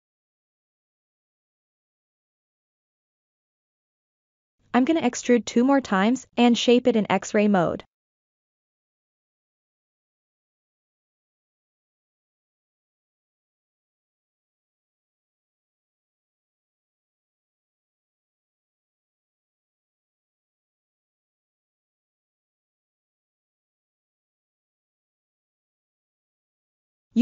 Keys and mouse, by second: 1.3 ', 2.9 KP_1, 4.2 click, 5.3 e, 6.7-8.2 drag, 8.6 g, 9.0 click, 11.4 e, 13.6-14.9 drag, 15.6 s, 16.2-17.5 drag, 18.0 alt+z, 18.9 1, 20.3 click, 21.6 g, 22.0-23.5 drag, 23.6 ctrl+z, 23.8 click, 24.0 click, 24.3 click, 24.7 click, 24.8 click, 25.1 click, 25.3 click, 25.5 click, 25.6 click, 26.4 click, 26.6 click, 26.9 click.